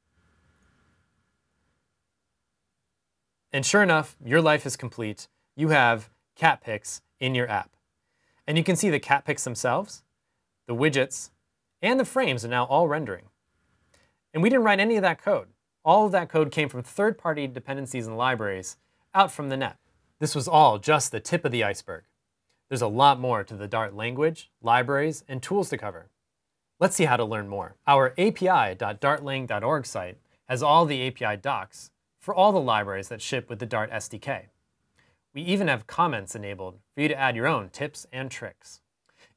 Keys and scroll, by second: 0.4 super+r.